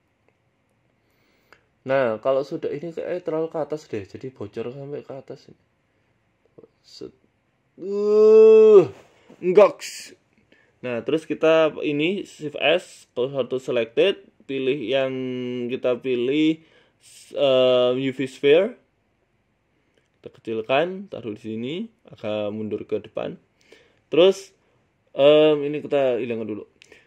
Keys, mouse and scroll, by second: 26.6 click.